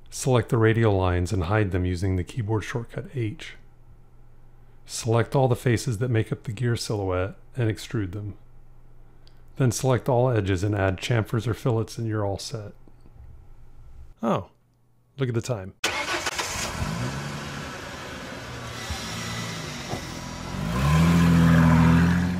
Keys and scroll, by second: 4.1 h.